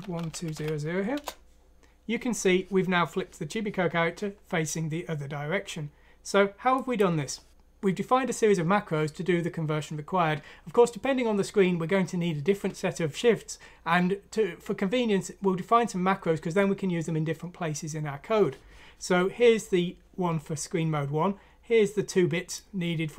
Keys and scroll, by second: 0.0-0.5 typing, 1.1 Return, 1.6 typing.